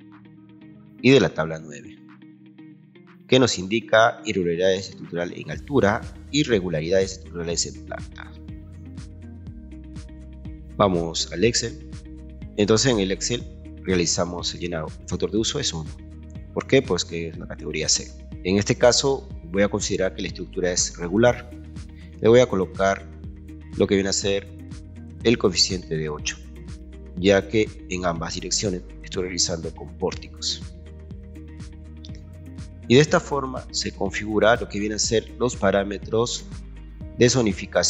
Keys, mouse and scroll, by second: 2.5-3.6 scroll up 6, 12.5 scroll down 2, 15.6 click, 16.8 click, 18.8 click, 21.9 click, 23.2 click, 31.3 click.